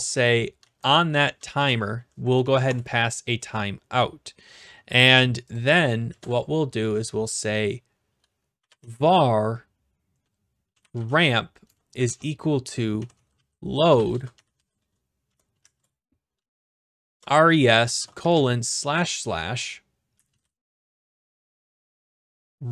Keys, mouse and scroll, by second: 0.6 ,, 1.5 shift+', 2.4 Down, 2.7 Return, 5.6-6.6 drag, 6.1 Return, 8.3-9.3 typing, 10.4-18.7 typing, 19.9-22.7 typing.